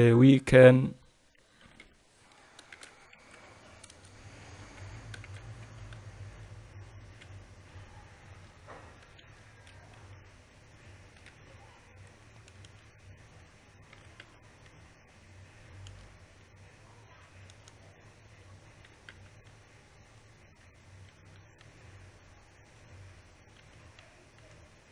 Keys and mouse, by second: 2.3 e, 5.4 e, 7.9 f, 9.6 a, 9.9 a, 10.6 KP_1, 11.9 KP_Decimal, 13.2 a, 13.4 a, 14.6 e, 18.4 a, 19.5 g, 21.7 ctrl+r, 24.3 ctrl+2.